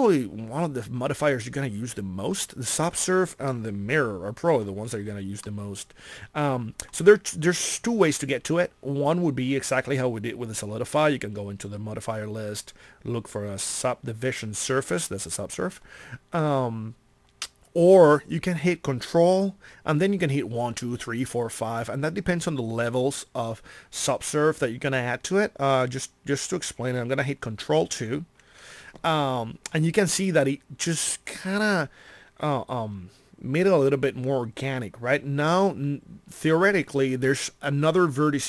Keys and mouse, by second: 27.9 ctrl+2.